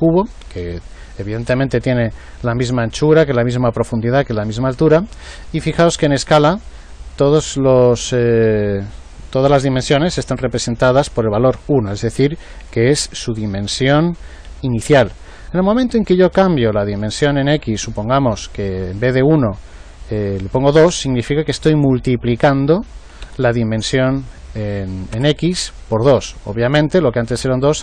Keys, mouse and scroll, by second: 17.0 click.